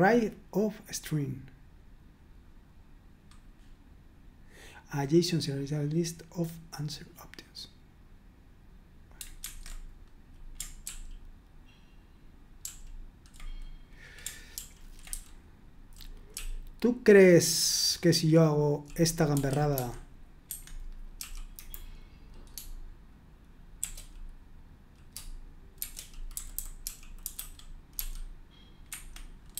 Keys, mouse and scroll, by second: 9.5 super+1, 10.8 ctrl+p, 12.6 ctrl+p, 14.5 ctrl+p, 15.1-19.7 typing, 20.5 Escape, 21.2 l, 21.5 Delete, 23.8 shift+g, 25.6-27.9 typing, 28.9 Escape, 29.3-29.5 typing.